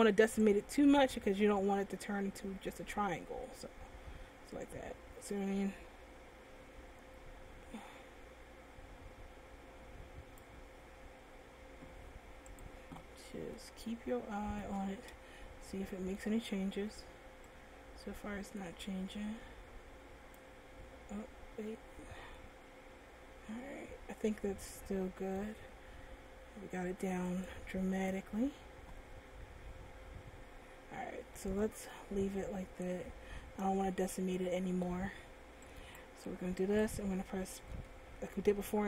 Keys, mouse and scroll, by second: 0.8 click, 12.8 click, 13.1 scroll up 2, 13.7 middle click, 15.6 shift+middle click, 17.6 click, 22.5 middle click, 27.5 click, 30.8-31.5 scroll down 2, 31.5 middle click, 36.0 right click, 37.0 Tab, 38.0 a.